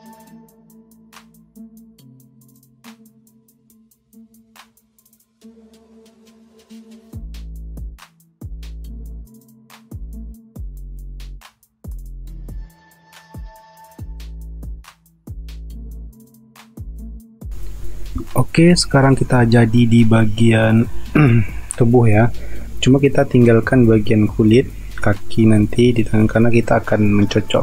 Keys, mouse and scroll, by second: 0.2 space, 0.9 space, 3.6 alt+Delete, 3.7-8.5 typing, 10.3 ctrl+z, 11.4 ctrl+z, 12.6-13.4 typing, 15.7 typing, 17.3 space.